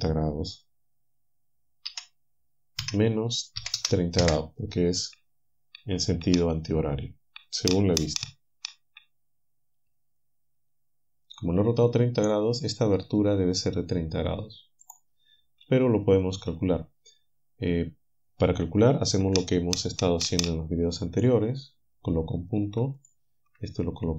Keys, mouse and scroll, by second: 1.9 r, 3.6 KP_3, 3.8 KP_0, 4.2 Return, 15.6 a, 16.0-16.8 scroll up 1, 17.4 scroll down 1.